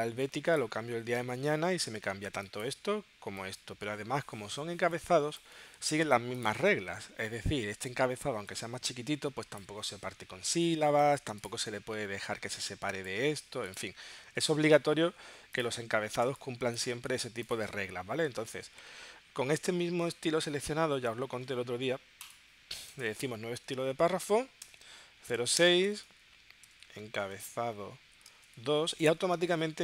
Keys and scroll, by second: 14.5 super+Tab, 16.4 space, 24.3 0, 28.1 0.